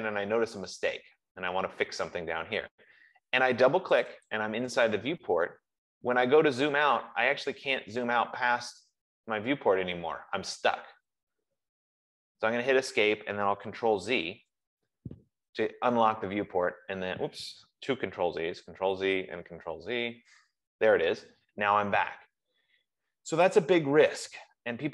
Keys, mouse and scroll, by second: 0.4 middle click, 1.1 middle click, 1.7 middle click, 4.4 click, 4.7 scroll, 4.9 click, 6.5 scroll, 7.2-8.1 scroll, 8.1-8.5 scroll, 9.0-10.0 scroll, 10.4-11.5 scroll, 12.1 scroll, 12.7 Escape, 12.7 scroll, 14.1 ctrl+z, 15.9-16.5 scroll, 16.5-17.2 scroll, 18.6 ctrl+z, 19.3 ctrl+z, 20.2 ctrl+z, 22.2 F15.